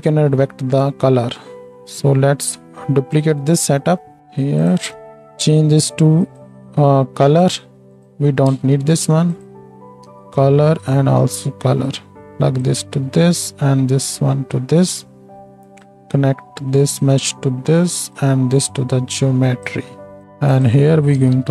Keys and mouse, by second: 4.2 click, 4.2-4.6 right drag, 5.1-8.0 drag, 5.1 middle click, 5.1 right click, 6.2-21.5 middle drag, 6.2-21.5 right drag, 8.4 ctrl+x, 9.2-21.5 drag.